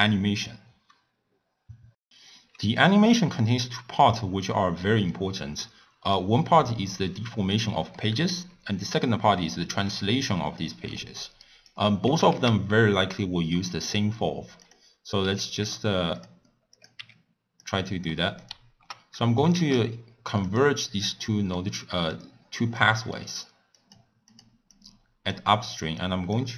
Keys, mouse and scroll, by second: 4.0-6.1 middle drag, 6.1 click, 7.5 click, 7.9-11.0 middle drag, 11.4-12.0 shift+right drag, 12.0 g, 14.5 click, 15.2 h, 15.6 g, 16.7 click, 17.0 g, 18.1-19.2 middle drag, 19.2 click, 19.9 shift+d, 21.2-23.7 middle drag, 23.7 click, 24.7-26.5 drag.